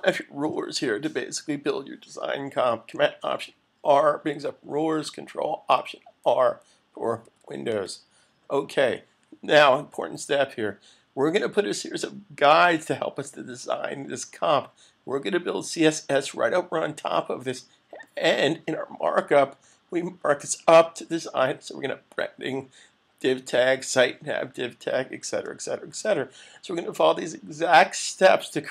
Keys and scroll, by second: 4.2 alt+super+r, 6.9 r, 19.4 super+=, 20.0 super+=, 25.6 super+-, 26.4 super+-.